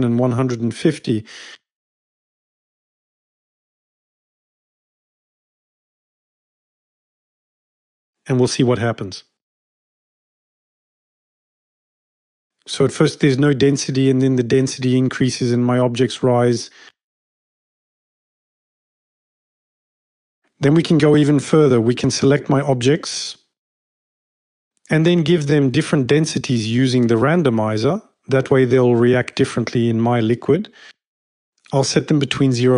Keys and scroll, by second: 0.0-0.7 typing, 3.2-4.1 typing, 5.1-6.7 typing, 30.3-32.1 typing, 32.1 Tab.